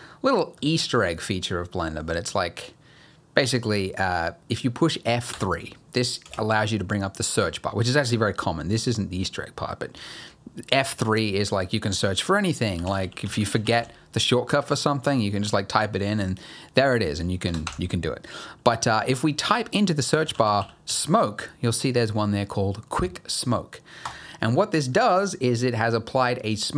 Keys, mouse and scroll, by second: 5.3 F3, 24.6-26.7 scroll down 2.